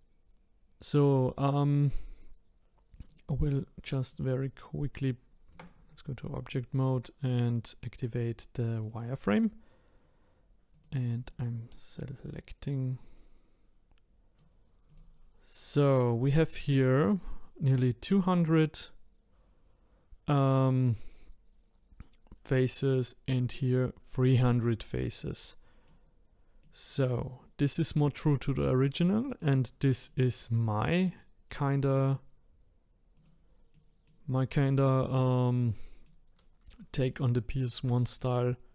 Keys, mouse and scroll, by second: 2.9 click, 4.1 click, 5.5 Tab, 7.5-10.6 drag, 10.7 click, 11.1 click, 12.7 click, 14.9 click, 25.0-33.1 middle drag, 33.1 click, 33.7-38.4 middle drag, 38.4 scroll up 2.